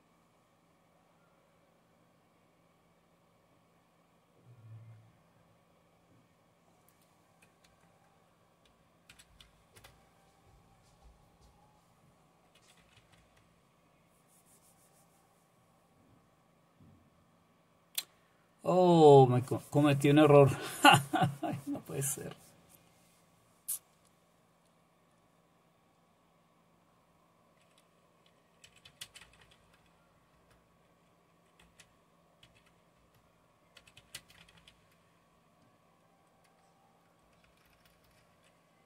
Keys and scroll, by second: 7.6 Up, 9.8 Return, 12.6-13.5 typing, 28.4-29.4 typing, 30.3 Return, 31.4-35.0 typing, 33.0 Return, 37.2-38.8 typing.